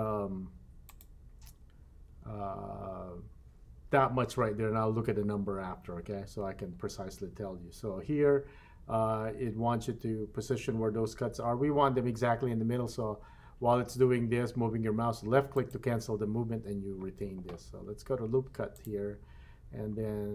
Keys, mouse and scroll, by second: 18.8 click.